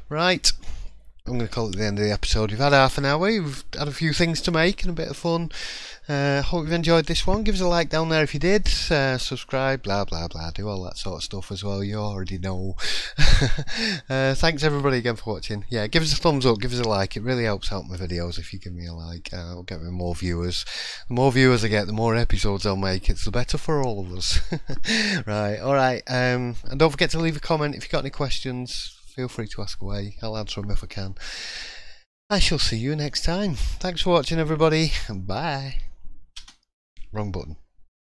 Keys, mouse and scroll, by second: 0.3-0.7 scroll down 3, 0.8 shift+middle click, 36.3 KP_0.